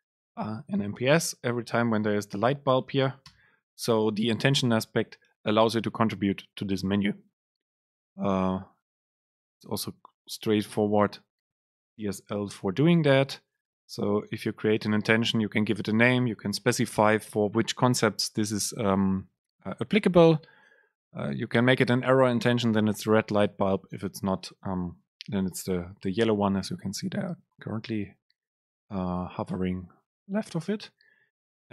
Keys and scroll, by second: 21.0 Down, 21.6 Up, 21.8 Down.